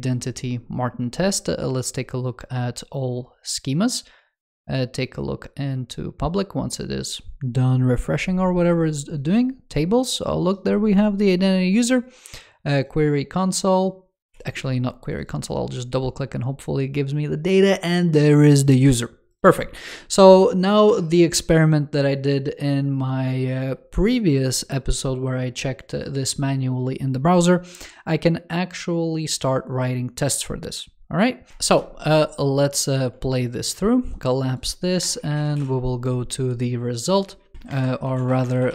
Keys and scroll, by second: 14.2 super+w, 37.6 shift+super+Left, 37.9 super+x.